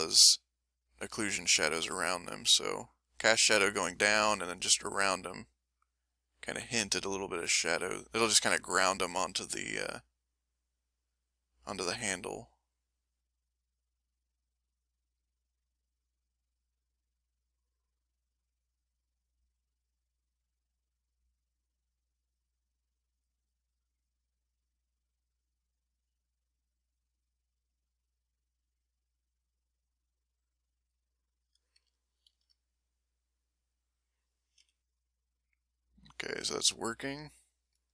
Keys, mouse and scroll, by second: 0.1 click, 0.8-2.5 drag, 2.7 click, 4.4-8.2 drag, 8.3 middle click, 8.9 middle click, 9.9-12.8 drag, 13.1 click, 14.1 click, 16.4 click, 16.9 click, 18.1-20.1 drag, 20.2 click, 20.8-24.2 drag, 24.5 middle click, 25.3-27.8 drag, 27.9 middle click, 28.4-31.1 drag, 31.4 middle click, 32.0-34.4 ctrl+middle drag, 34.6 m, 34.8-37.1 middle drag, 37.4 ctrl+middle click.